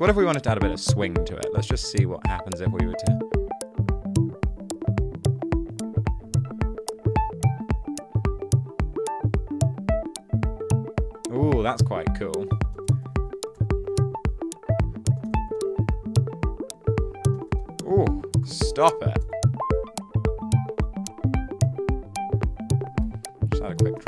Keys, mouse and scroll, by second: 12.2-13.5 typing, 14.1 super+z, 15.0-16.1 typing, 17.2-18.1 typing, 18.5 Return, 19.0 Down, 19.2 Return, 23.1 super+f, 23.9 super+a.